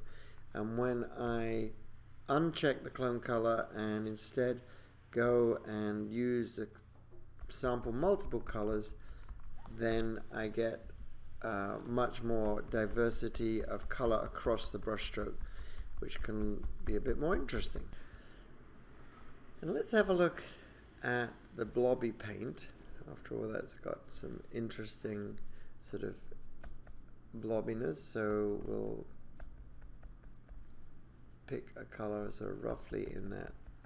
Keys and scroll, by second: 10.9 super+=.